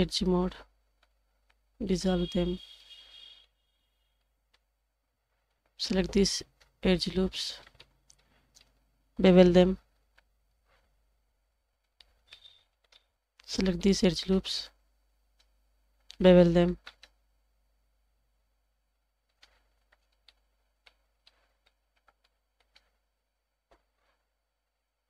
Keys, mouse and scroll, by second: 0.5 2, 1.8 ctrl+x, 2.5 scroll down 1, 2.8 middle click, 3.7-4.3 scroll up 2, 4.3 middle click, 4.3 click, 5.4 alt+click, 6.3 alt+shift+click, 7.3 scroll up 2, 7.8-8.2 shift+middle drag, 8.6-9.1 shift+middle drag, 10.0 ctrl+b, 11.7 Tab, 11.8 scroll down 3, 12.0 middle drag, 12.4-12.8 scroll up 3, 12.8 shift+middle drag, 13.4 Tab, 13.8-14.2 shift+middle drag, 15.0 alt+click, 15.7 alt+shift+click, 16.8 ctrl+b, 19.7 Tab, 19.9 scroll down 1, 20.3-20.8 middle drag, 21.2-21.6 middle drag, 21.9 scroll down 1, 22.2-22.6 shift+middle drag.